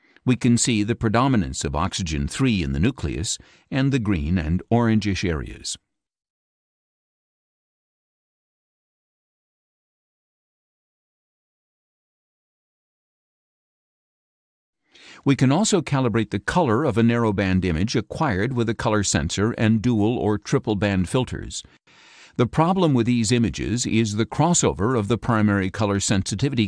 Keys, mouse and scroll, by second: 0.0-1.7 drag, 2.9 scroll down 2, 3.6-7.1 drag, 7.8-9.7 drag, 10.4-11.8 drag, 11.9 click, 17.5 click, 22.0 click, 22.5 click, 23.5 ctrl+click, 24.1 ctrl+scroll down 2, 25.1 ctrl+click.